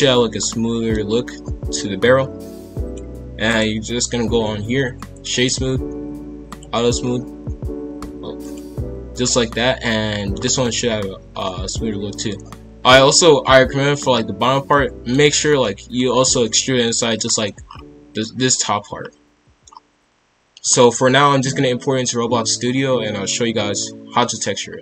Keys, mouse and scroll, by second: 0.0-0.4 scroll up 2, 0.4-2.8 middle drag, 2.8 click, 3.4 right click, 6.4 click, 6.9-8.0 scroll down 1, 8.0 click, 8.4 click, 9.1-10.4 middle drag, 10.4 scroll down 1, 10.6-17.6 middle drag, 17.6-18.1 scroll up 5, 18.9-19.3 scroll down 1, 19.3 middle drag, 19.6-20.0 scroll down 1, 20.0-20.6 middle drag, 20.6-21.2 scroll down 1.